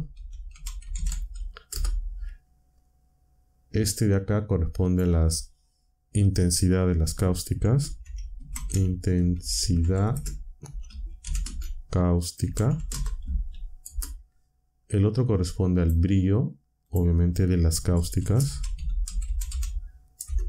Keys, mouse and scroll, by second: 0.0-2.7 typing, 1.7 Return, 3.7 click, 4.8 click, 7.3-13.8 typing, 15.7 click, 15.7-16.5 typing, 16.8 click, 17.9-20.4 typing.